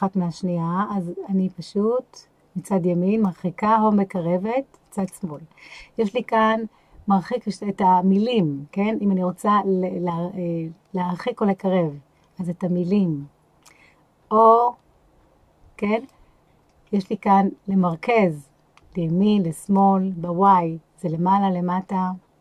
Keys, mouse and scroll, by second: 0.0-5.0 drag, 11.6-13.7 drag, 14.4-16.1 drag, 16.9-17.9 scroll down 1, 17.9-19.8 drag, 20.5-22.4 drag.